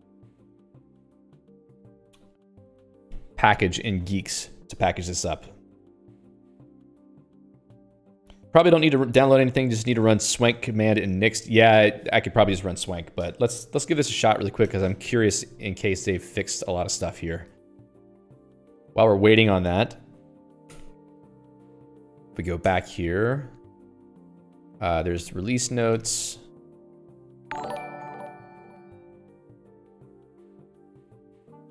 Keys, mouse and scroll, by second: 18.6 l.